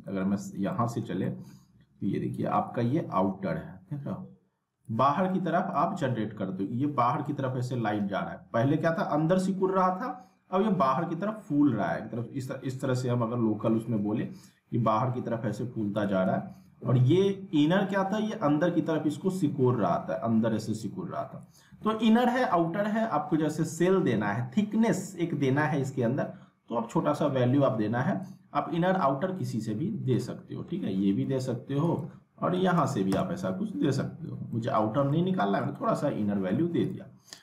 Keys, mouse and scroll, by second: 0.0 ctrl+z, 0.4 scroll down 1, 0.7 middle click, 1.0 scroll down 1, 1.2 middle click, 2.7-4.8 drag, 5.1 scroll down 1, 5.3 middle click, 5.7 ctrl+z, 12.2-14.3 drag, 16.0 ctrl+click, 16.2 ctrl+z, 18.3-21.7 drag, 21.7 ctrl+z, 22.5 alt+w, 25.6-28.4 drag, 29.0-31.2 middle drag, 31.2 z, 31.9 click, 34.5-35.7 alt+middle drag, 36.8 click.